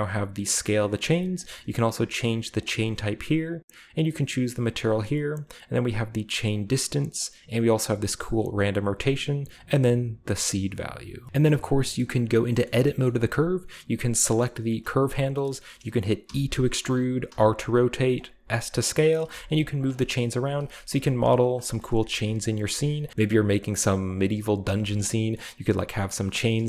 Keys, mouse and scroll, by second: 0.9-2.2 middle drag, 2.6 click, 3.5 click, 4.8 click, 5.5 click, 6.6 middle click, 8.7-10.8 middle drag, 11.5-12.2 scroll up 2, 12.3 middle click, 12.6 shift+middle click, 13.0 middle click, 13.9-14.6 scroll down 3, 14.3 middle click, 14.6 right click, 15.4-16.4 shift+middle drag, 16.2 e, 16.7 click, 17.3 r, 18.1 click, 18.3-20.8 typing, 19.1 click, 19.9-22.1 shift+middle drag, 20.2-20.8 shift+scroll down 1, 21.9-24.6 typing, 22.2 middle click, 22.3 middle click, 22.4 click, 23.0 click, 24.0 click, 24.8 click, 25.1 middle click, 25.9 middle click, 26.2 e, 26.2 click, 26.5 s.